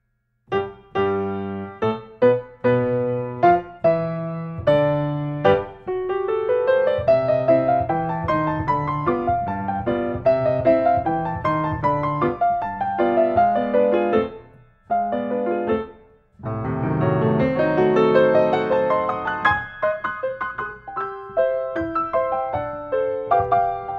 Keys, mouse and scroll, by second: 1.1 scroll down 1, 1.2 scroll, 1.5 scroll down 4, 2.6 scroll, 3.7 click, 8.1 click, 9.3-9.8 scroll, 9.9 scroll down 6, 11.3 scroll, 13.9-15.0 drag, 17.5 scroll, 18.7 scroll, 19.8 scroll, 22.1 click, 22.9 click.